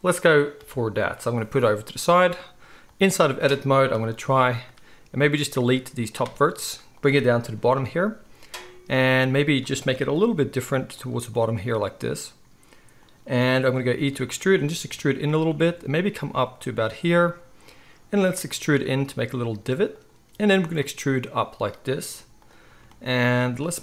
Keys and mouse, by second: 2.9-7.0 drag, 5.5 x, 7.0-9.0 shift+middle drag, 9.0-11.0 drag, 10.2 g, 11.0-11.4 middle drag, 11.4-13.1 drag, 11.8 g, 13.1-14.8 middle drag, 13.9 e, 14.7 e, 15.6 e, 16.3 e, 18.2 e, 20.6 e, 23.7 g.